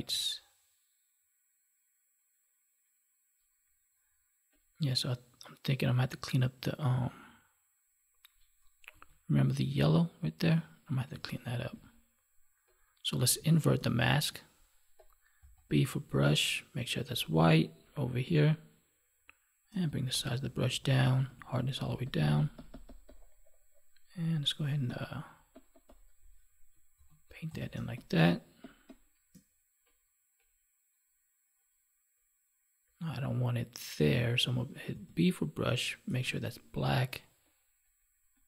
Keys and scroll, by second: 11.4 ctrl+1, 13.7 ctrl+i, 26.9 ctrl+s, 27.7 space.